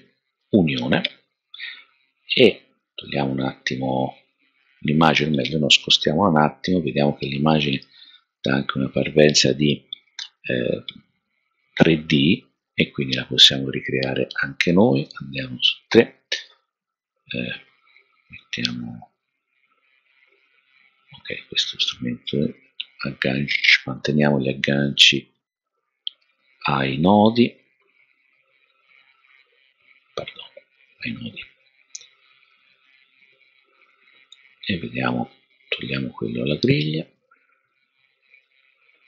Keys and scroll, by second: 6.2 shift+Right, 6.6 shift+Right, 6.8 shift+Right, 15.1 3.